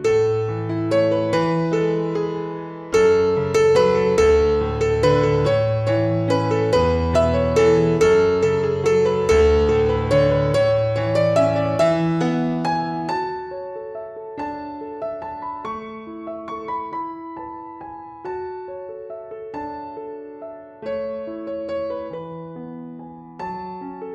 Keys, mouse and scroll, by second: 1.7 click, 3.2 right click, 5.0 click, 12.0 click, 14.5 ctrl+t, 15.1 right click, 16.4 click, 23.3 Right.